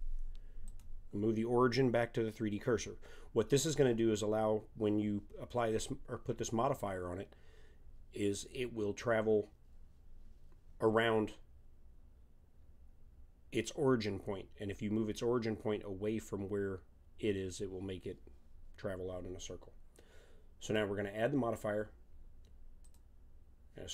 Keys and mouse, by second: 20.6-22.5 drag.